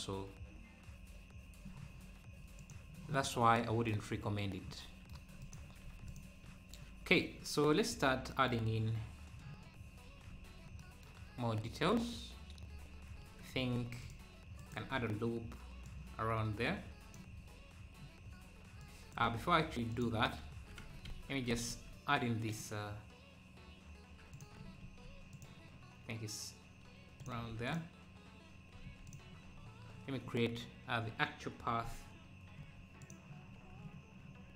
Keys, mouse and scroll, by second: 5.4 click, 5.9 ctrl+s, 6.1 click, 6.5 `, 7.4 `, 7.9-8.3 scroll up 1, 9.0-9.3 scroll down 5, 9.6-10.0 scroll up 2, 10.3 ctrl+s, 11.6 `, 12.6 scroll down 1, 12.7 Tab, 13.8 ctrl+r, 14.9-15.8 scroll down 3, 15.8-17.3 drag, 17.4-17.8 scroll up 2, 18.8 click, 19.2 Tab, 19.9 click, 20.3 scroll down 1, 20.8 Tab, 21.7 ctrl+r, 27.7-29.3 drag, 32.6 3, 33.0 click, 33.5 scroll down 1, 34.4 scroll down 2.